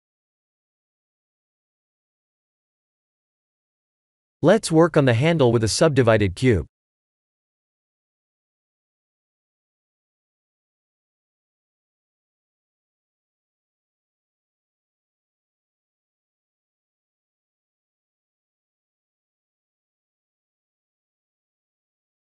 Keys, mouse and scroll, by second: 0.0 KP_1, 0.9 shift+z, 2.8 shift+z, 3.3 click, 3.8-4.2 scroll down 3, 4.4 shift+a, 8.6-9.0 scroll down 6, 9.4 s, 10.9 s, 13.7-14.4 scroll up 4, 14.5 s, 17.4 click, 17.7 h, 19.0 click, 19.6 shift+h, 20.3 scroll up 2, 20.7 Tab, 21.4 ctrl+r.